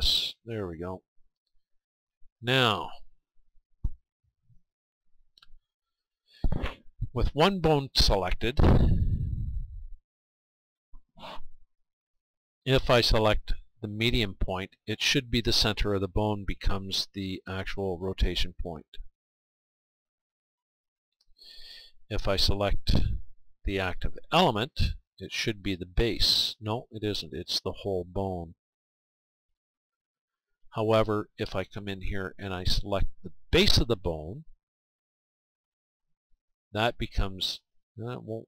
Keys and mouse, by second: 4.0-6.0 right drag, 8.2-10.1 right drag, 10.5-12.5 right drag, 13.2-18.1 drag, 18.1 r, 20.1 r, 21.1-23.0 right drag, 22.7-30.1 drag, 30.1-32.0 right drag, 33.5-37.2 right drag, 37.8-38.4 right drag.